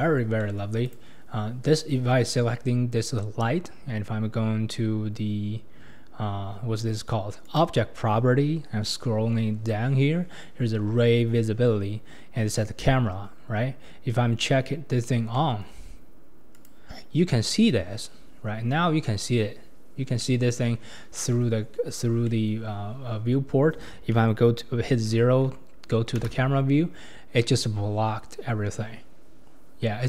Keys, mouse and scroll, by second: 0.9 click, 7.4 click, 8.8-11.0 scroll down 9, 15.3-16.6 middle drag, 16.6 click, 20.2-22.5 middle drag, 22.5-23.8 scroll down 1, 23.8-25.5 scroll down 1, 26.3 KP_0.